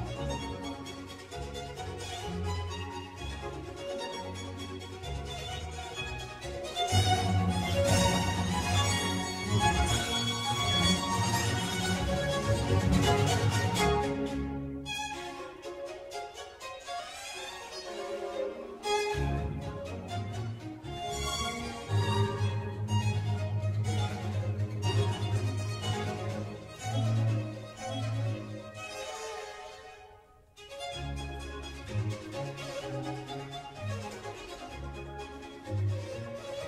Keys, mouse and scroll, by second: 3.9-4.6 scroll up 2, 4.6 middle click, 5.1 click, 6.9 click, 7.3 ctrl+r, 7.8 Tab, 8.8 ctrl+r, 15.2 click, 15.7 Tab, 16.0 middle click, 16.5-17.0 scroll down 2, 17.1 Tab, 18.1 3, 18.8 shift+middle click, 19.2-19.9 scroll up 2, 19.9 click, 20.5 s, 24.3 Tab, 24.6-25.3 scroll down 1, 25.3-26.5 middle drag, 26.5 click, 26.9-28.4 middle drag, 28.4-28.9 scroll up 1, 28.9 click, 29.3 Tab, 31.4 ctrl+r.